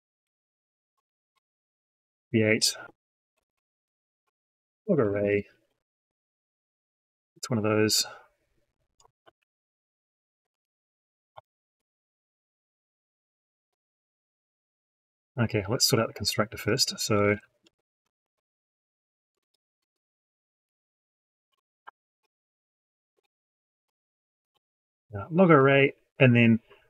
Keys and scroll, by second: 9.1 ctrl+c, 10.4 ctrl+v, 13.2 ctrl+shift+c.